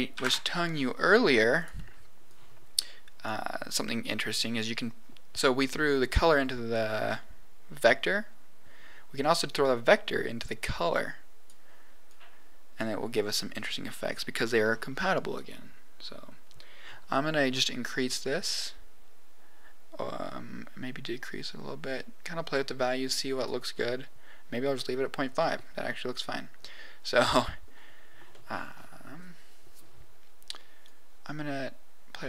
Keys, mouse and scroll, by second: 2.2 click, 9.3-11.4 drag, 12.0 click, 17.4 click, 20.8-23.4 drag, 25.3 scroll up 1, 25.3 middle click, 27.3 middle click, 28.2 middle click, 29.2-30.8 middle drag, 30.8-32.2 drag.